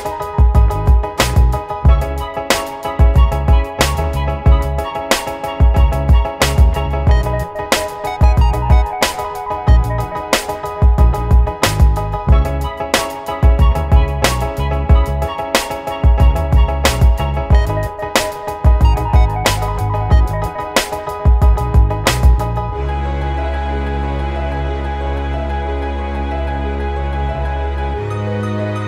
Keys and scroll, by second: 9.9 super+z, 14.6 super+g, 22.9 super+z.